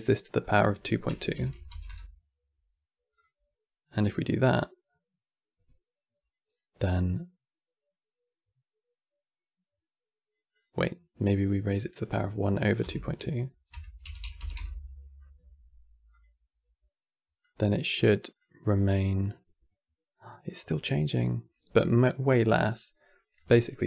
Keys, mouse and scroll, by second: 10.2 click, 11.6-14.7 drag, 15.8 click, 23.1 click.